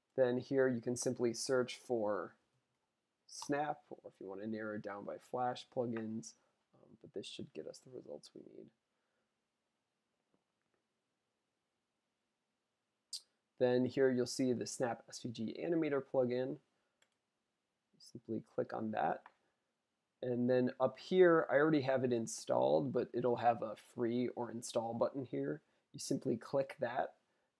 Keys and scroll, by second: 1.7-3.2 typing.